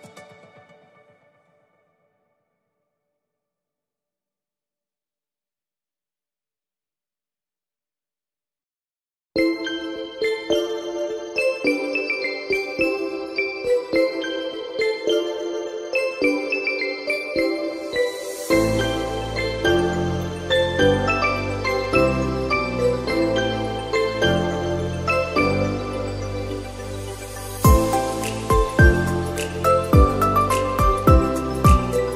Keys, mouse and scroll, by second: 0.7 KP_1, 2.7 g, 4.8 click, 4.9-5.3 scroll down 4, 5.4-5.9 middle drag, 5.9-6.3 scroll down 1, 6.3-7.1 middle drag, 7.1 shift+a, 9.5 s, 11.4 Tab, 13.0 click, 14.0 shift+click, 14.8 e, 17.1 click, 18.1 shift+click, 20.0 ctrl+b, 23.5 Tab, 24.2-25.5 right drag, 25.5-26.8 middle drag, 26.6 KP_0, 28.5 click, 29.4 click, 30.3-31.3 middle drag, 31.3-31.8 scroll down 2, 31.8-32.1 shift+middle drag.